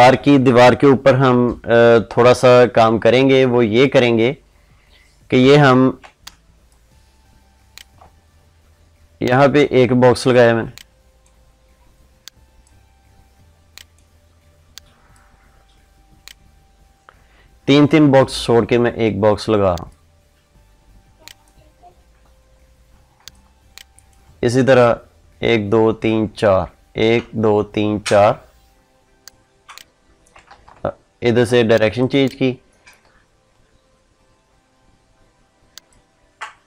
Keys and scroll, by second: 6.0 ctrl+space, 30.2 ctrl+z.